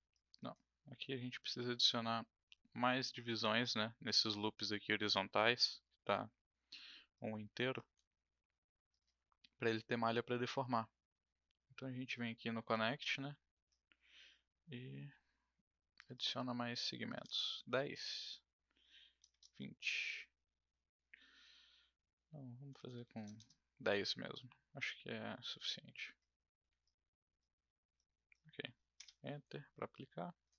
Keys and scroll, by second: 22.7 BackSpace, 22.8 BackSpace, 28.9 Return.